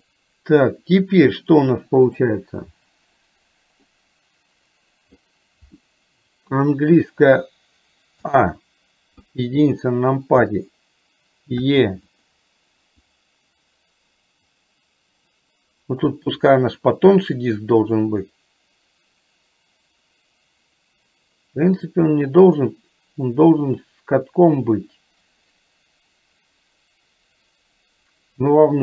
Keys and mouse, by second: 0.0 click, 4.0-5.1 middle drag, 9.3 KP_1, 11.6 e, 13.0-28.8 drag.